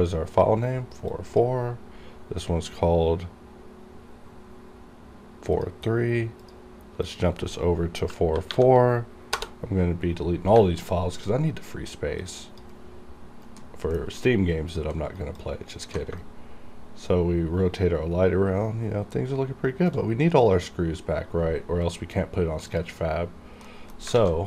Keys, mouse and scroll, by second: 8.6 4, 10.9-12.3 alt+drag, 12.3 alt+click, 12.8 alt+right click, 13.7 alt+middle click, 14.3 alt+click, 14.3 alt+click, 15.1 alt+right click, 15.5 alt+click, 16.3 shift+right click, 22.8 click, 23.7 middle click, 24.1-24.4 scroll up 2, 24.2 alt+a.